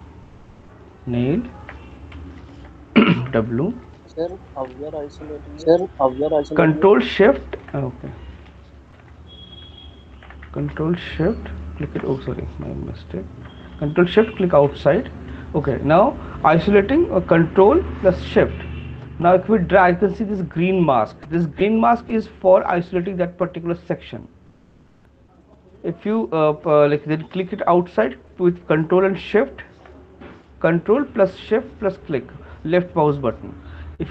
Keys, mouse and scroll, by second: 0.4 click, 1.1 alt+click, 2.5 shift+click, 3.1 w, 4.5 alt+click, 4.7 click, 8.5 click, 9.0 click, 9.1 alt+click, 10.3 right click, 11.7 click, 12.4 q, 13.4 alt+click, 14.5 click, 15.7 shift+click, 24.1 click, 28.3 click, 29.1 shift+click.